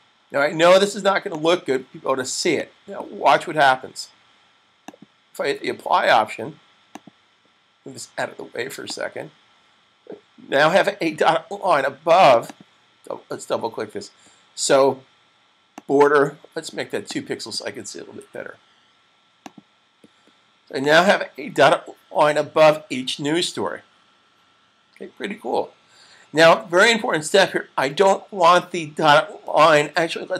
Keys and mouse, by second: 12.1 double click, 15.5 click, 18.0 typing, 19.1 click.